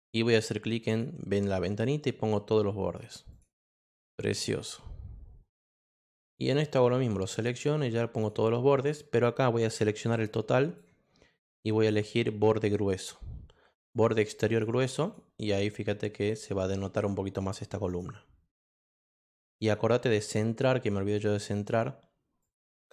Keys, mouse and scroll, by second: 0.8 click, 2.8 click, 3.3 click, 6.2-7.2 drag, 8.2 click, 8.8 click, 9.6-10.8 drag, 11.9 click, 14.4 click, 15.0 click, 17.8 click, 19.5 click, 20.2 click, 21.5 click, 22.4 click.